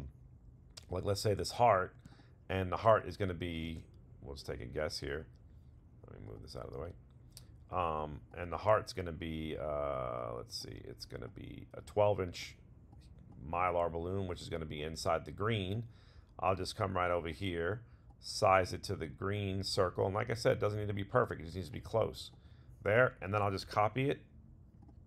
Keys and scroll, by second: 23.6 super+c, 23.7 super+BackSpace.